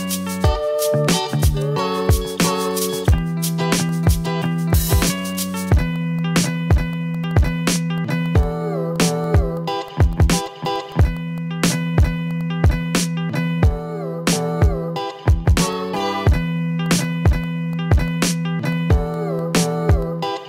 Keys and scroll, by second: 4.9 v, 5.4 ctrl+z, 5.6 Down, 5.8 Up, 6.3 Left, 6.9 Up, 8.2 v, 8.6 ctrl+z, 9.5 v, 9.9 ctrl+z, 10.4 v, 10.8 ctrl+z, 12.0 v, 16.6 ctrl+v, 17.5 ctrl+v, 18.2 ctrl+v, 19.2 ctrl+z, 20.1 ctrl+z, 20.3 ctrl+z.